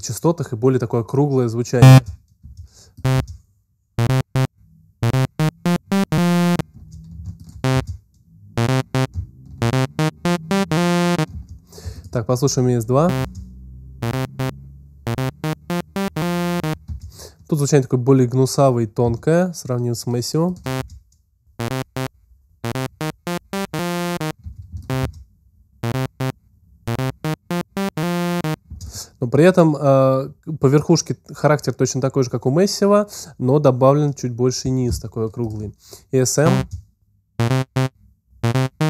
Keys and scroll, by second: 7.0 alt+space, 8.4 space, 11.6 alt+space, 13.0 space, 20.6 alt+space, 21.5 space, 24.5 alt+space, 25.8 space, 36.4 alt+space.